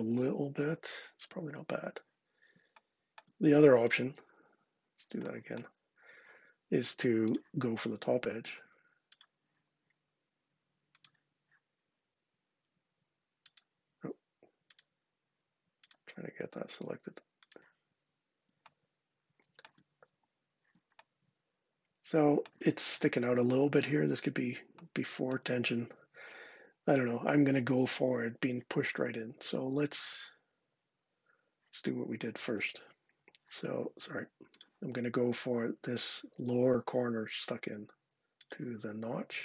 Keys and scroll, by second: 3.3 super+z, 3.8 super+z, 5.6 super+z, 28.7 super+z, 29.2 super+z, 32.3 super+z.